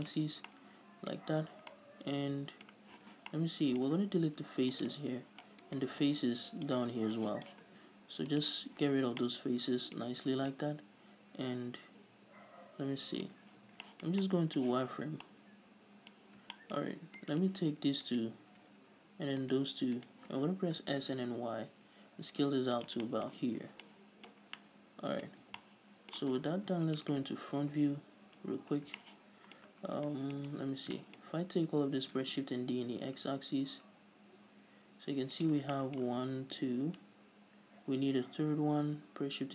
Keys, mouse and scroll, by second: 0.2 shift+click, 0.4 z, 0.6 middle click, 1.2 middle click, 1.3-1.8 scroll up 2, 1.4-5.3 middle drag, 3.1 z, 4.2 x, 5.3-5.8 scroll up 2, 5.8 right click, 6.2 ctrl+click, 7.3 click, 7.8 x, 8.7 middle click, 8.7-9.3 scroll down 4, 8.9 z, 9.3 middle click, 10.1-10.5 scroll up 2, 10.5 Tab, 10.6-14.8 middle drag, 13.4 scroll up 2, 13.6 Tab, 15.2 a, 15.4 middle click, 16.3-16.7 scroll up 2, 16.7 shift+middle click, 17.3 alt+right click, 18.2 alt+shift+right click, 20.1 alt+shift+right click, 20.8 s, 23.0 click, 23.2-35.6 middle drag, 23.6 z, 23.7 scroll down 2, 24.6 scroll down 2, 25.4 scroll up 2, 25.6 Tab, 26.5-27.9 scroll down 2, 28.1 KP_1, 28.6 scroll up 1, 28.9 scroll down 1, 30.0 scroll down 1, 30.8 Tab, 31.4 a, 32.2 shift+d, 35.6 shift+click, 35.7 scroll down 3, 35.9-39.5 shift+middle drag, 38.8-39.5 scroll up 2.